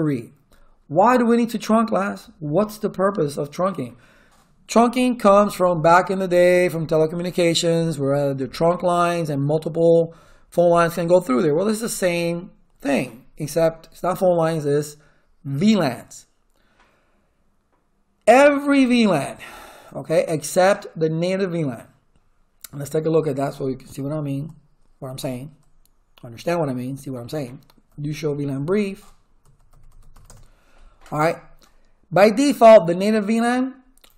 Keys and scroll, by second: 23.7-24.6 typing, 27.6-30.6 typing.